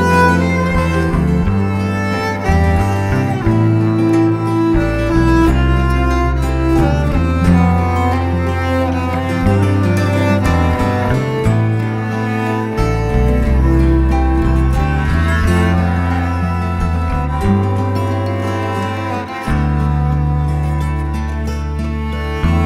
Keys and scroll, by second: 0.2 alt+shift+Return, 1.0 shift+t, 2.0-3.1 typing, 4.8 shift+super+t, 6.4 shift+Return, 8.2 shift+Up, 9.8 shift+m, 12.3 shift+Delete, 12.8 shift+super+d, 12.9 shift+super+v, 13.5 shift+Up, 15.2-19.8 typing.